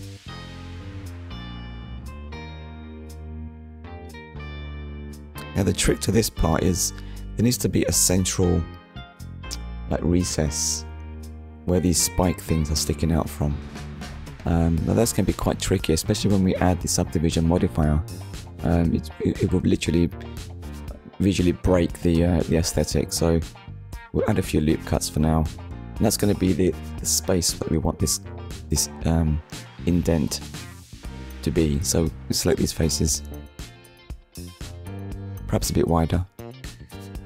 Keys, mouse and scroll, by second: 1.2 click, 3.3 middle click, 4.0 click, 4.3 Tab, 5.5 ctrl+r, 7.6-8.0 scroll up 1, 9.5 click, 10.3 right click, 11.1 middle click, 15.3 click, 16.6 middle click, 20.6 click, 21.8 alt+click, 22.5 alt+shift+click, 23.0 middle click, 25.7 middle click, 26.6 click, 27.4 middle click, 28.7 click, 29.2 shift+click, 32.5-32.9 scroll up 1, 36.6 shift+click.